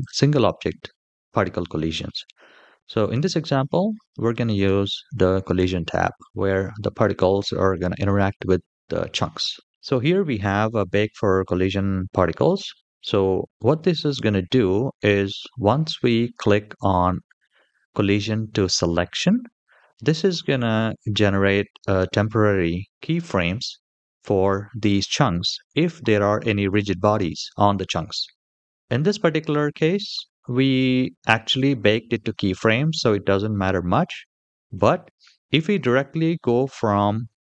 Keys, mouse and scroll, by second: 4.3 click, 23.2-24.0 middle drag, 28.3-28.8 middle drag, 32.0 middle click, 34.1-34.5 shift+middle drag, 34.9 scroll up 1, 35.5 middle click.